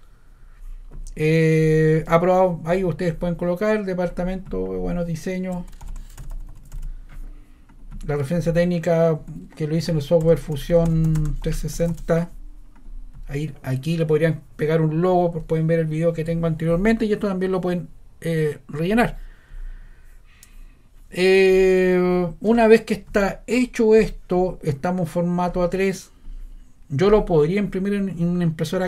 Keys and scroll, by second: 5.5-7.1 typing, 9.5-12.3 typing.